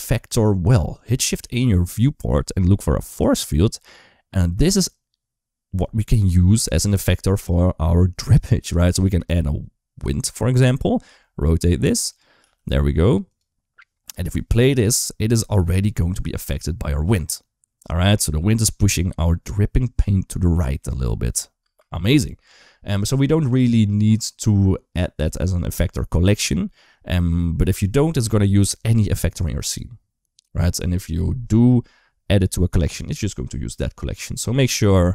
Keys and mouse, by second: 0.7 click, 1.2 shift+a, 10.1 shift+middle click, 10.9 r, 12.3 g, 14.5 space, 21.4 space, 21.8 click.